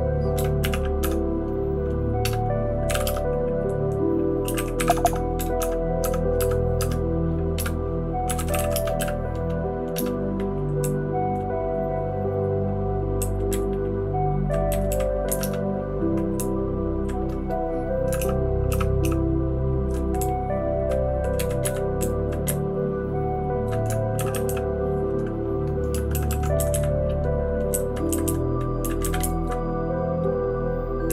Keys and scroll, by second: 13.2 Down, 13.5 Down, 13.6 Down, 14.1 Down, 14.2 Down, 14.3 Down, 14.4 Down, 14.7 Down, 14.9 Down, 15.2 Up, 15.6 Return, 16.4 Down, 16.9 Down, 16.9 Down, 18.2 }, 18.7 }, 19.0 }, 20.2 Down, 20.7 Down, 20.7 Down, 20.8 Down, 21.4 Down, 21.6 Up, 22.0 Down, 22.2 Down, 22.4 Up, 22.9-23.6 Up, 24.1 shift+[, 24.3 shift+[, 24.4 shift+[, 26.1 ctrl+w, 26.2 ctrl+w, 26.5 Up, 26.7 Up, 27.7 Up, 28.1 Up, 28.2 Up, 28.8 Down, 29.0 Up, 29.2 Up, 29.3 Up, 31.0 Down.